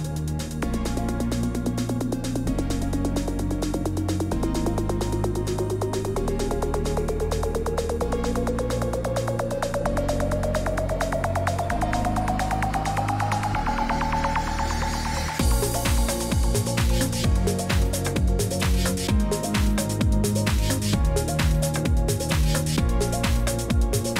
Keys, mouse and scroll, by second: 13.5 click, 14.4 click, 15.2 click, 15.4 click, 16.3 click, 17.3 click, 17.3-17.8 scroll down 3, 19.5 click, 19.6 scroll down 1, 20.5 scroll down 1, 21.0 shift+click, 22.0 scroll, 22.6 Delete.